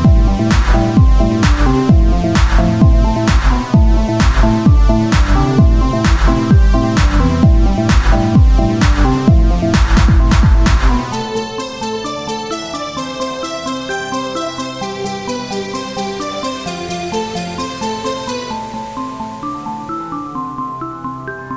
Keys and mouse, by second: 2.1 KP_1, 2.5 z, 3.5 e, 5.9 r, 6.9-8.8 drag, 8.8 e, 10.3 r, 12.3-16.4 drag, 16.4 e, 20.6 r.